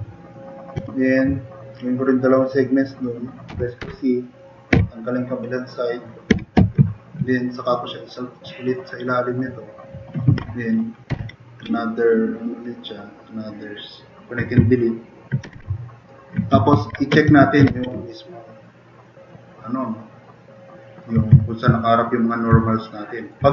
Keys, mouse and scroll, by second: 3.5 c, 3.8 2, 4.7 f, 6.3 4, 11.2 ctrl+shift+e, 15.5 2, 16.7 ctrl+a, 17.3 3, 17.7 ctrl+a, 18.0 click.